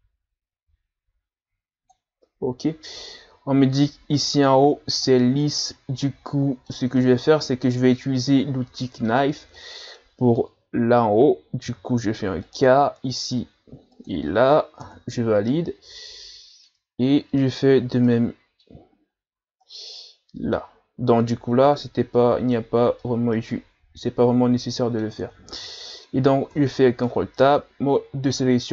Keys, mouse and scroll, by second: 0.2-1.9 drag, 5.1-11.6 middle drag, 11.6 k, 15.5-17.0 middle drag, 17.0-17.6 scroll up 1, 17.6-18.1 scroll up 1, 18.1-26.5 middle drag, 26.5 ctrl+Tab.